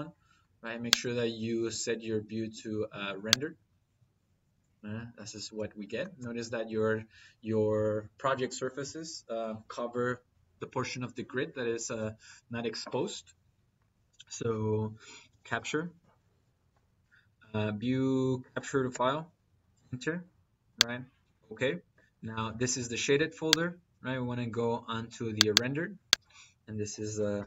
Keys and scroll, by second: 14.2 Escape, 15.0-16.1 typing, 16.6 Down, 18.7 Return, 27.2 t.